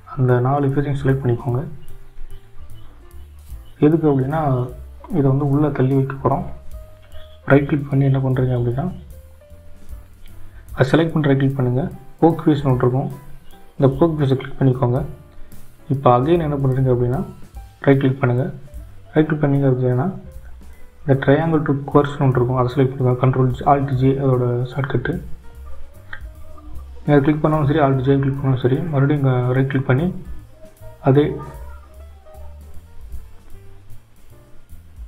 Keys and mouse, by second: 0.6 click, 4.4 shift+click, 5.4 shift+click, 6.2 shift+click, 7.5-13.1 right drag, 18.7-26.0 right drag, 29.6-33.1 right drag.